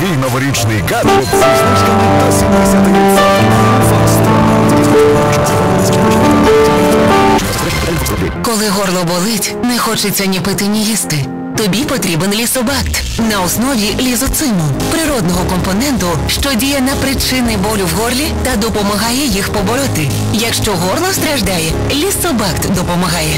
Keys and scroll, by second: 7.8 Page_Down.